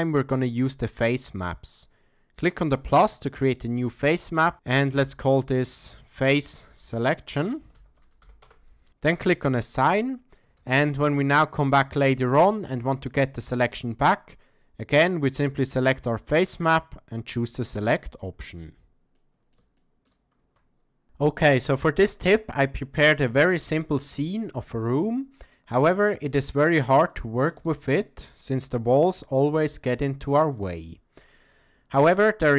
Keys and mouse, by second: 0.3 click, 2.6 click, 3.6-4.7 drag, 5.1-6.3 shift+drag, 10.4 a, 10.6 a, 11.3 middle click, 12.0-12.5 shift+middle drag, 12.8-14.1 ctrl+middle drag, 15.3 click, 17.7 click, 19.1-20.1 middle drag, 20.4 Tab, 21.0 n, 21.9-23.2 middle drag, 24.1-25.0 middle drag, 25.5-26.0 middle drag, 26.0 click, 26.5 middle click, 27.1-27.5 shift+middle drag, 29.0 a, 29.1 a, 30.0-30.7 middle drag.